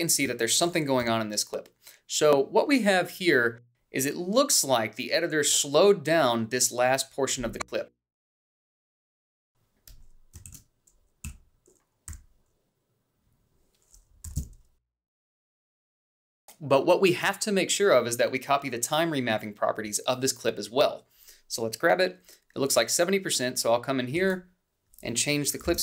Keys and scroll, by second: 1.2 h, 3.0 =, 10.1 f, 13.3 f, 14.2 i, 16.4 i, 16.5 Down, 17.0 Left, 18.0 b.